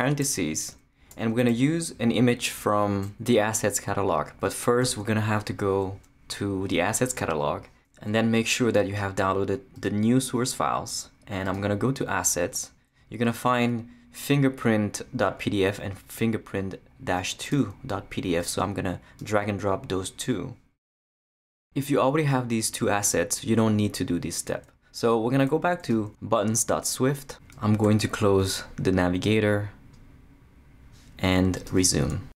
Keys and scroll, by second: 0.0-1.1 typing, 4.8 super+0, 27.8 super+0.